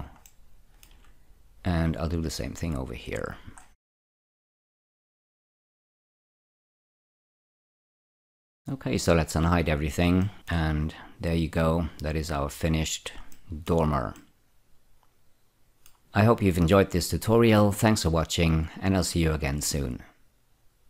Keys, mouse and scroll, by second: 0.6 shift+middle click, 2.7 click, 3.6-4.5 scroll up 2, 4.5 click, 5.4 scroll down 3, 6.0 middle click, 7.5 z, 8.0 scroll down 1, 8.1 Tab, 8.2 scroll up 2, 8.3 w, 9.3 click, 10.3 middle click, 12.7 click, 13.7 shift+middle click, 14.8 middle click.